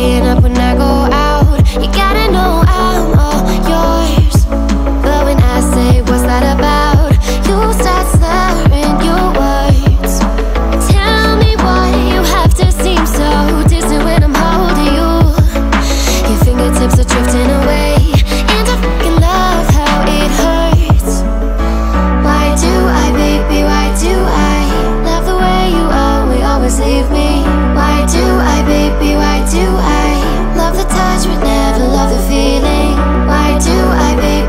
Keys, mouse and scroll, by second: 10.1-14.6 drag, 27.2 click, 27.9-28.4 drag, 31.8 ctrl+a, 34.2-34.4 drag.